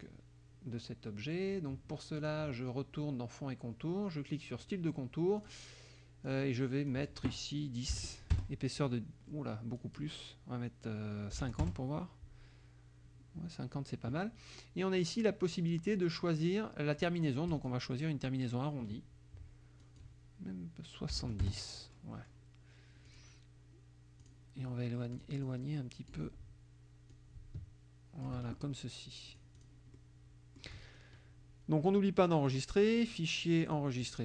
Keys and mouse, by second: 2.2 click, 4.6 click, 5.4 click, 6.3 click, 6.9 click, 8.0 1, 8.1 KP_0, 8.4 KP_Enter, 9.8 click, 11.4 KP_5, 11.5 0, 11.7 Return, 17.5 click, 19.8 click, 21.2 7, 21.4 Return, 23.1 click, 24.3 click, 25.1 click, 27.1-28.5 ctrl+drag, 29.3 click, 30.0 middle click, 32.6 click, 33.7 click.